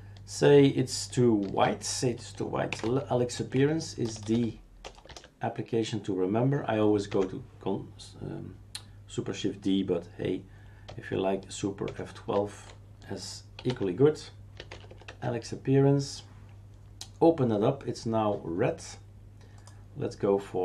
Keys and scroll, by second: 1.4 shift+super+d, 2.4-5.1 typing, 7.1 Escape, 11.8 super+F12, 13.3-15.4 typing.